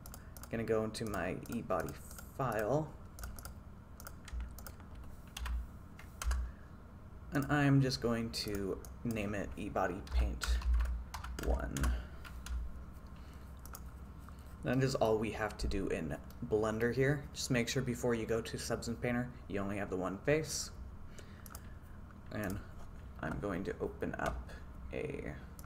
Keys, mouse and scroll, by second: 16.4-16.9 middle drag.